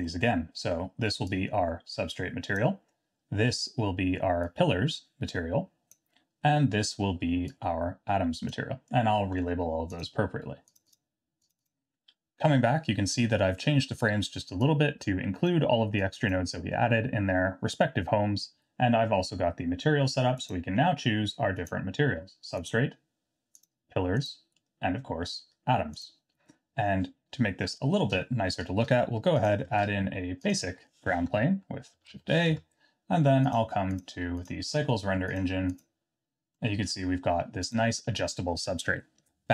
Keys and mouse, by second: 0.0 middle click, 1.3-2.6 drag, 4.6-6.0 drag, 7.5-8.5 drag, 10.9 click, 11.5 click, 14.7-15.5 drag, 16.0 click, 20.5-21.7 drag, 22.7-23.7 drag, 24.2-26.1 drag, 29.4 click, 29.7 shift+a, 31.1 Tab, 31.4 s, 32.5 Tab, 34.0-34.7 drag, 35.3-36.2 drag, 36.6 middle drag, 37.6 click.